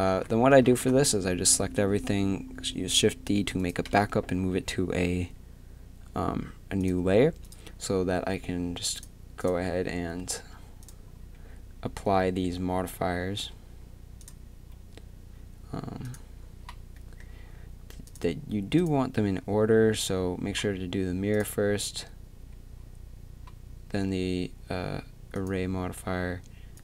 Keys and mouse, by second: 0.1 a, 0.8 shift+d, 4.3 m, 8.6 right click, 14.2-19.3 drag, 21.3-24.6 drag, 25.3-26.8 drag.